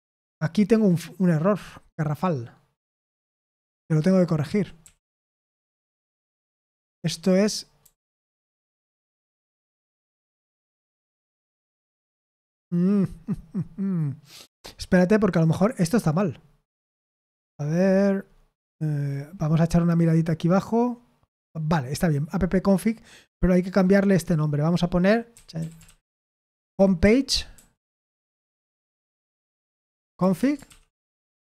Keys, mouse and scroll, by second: 0.0 ctrl+p, 2.9 Return, 3.5-8.3 typing, 10.5 Escape, 15.4 click, 16.2 scroll down 2, 16.4 scroll up 2, 16.7-17.7 scroll down 4, 17.7 scroll up 2, 17.9 scroll down 2, 18.0-18.5 scroll up 2, 18.7-22.4 scroll down 2, 23.2 click, 23.4 click, 25.0-31.4 typing, 29.3 Escape.